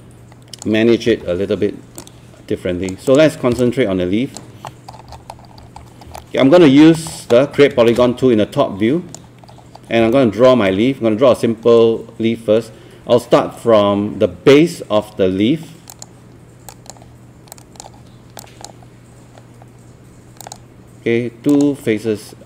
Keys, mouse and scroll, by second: 1.1 w, 2.0-4.9 drag, 4.9 scroll down 1, 5.5 scroll up 1, 6.2 alt+scroll up 1, 6.2 middle click, 7.0 alt+middle click, 7.5 scroll up 1, 7.9-9.6 shift+right drag, 9.6 scroll up 1, 10.2 alt+middle click, 15.9-18.7 drag.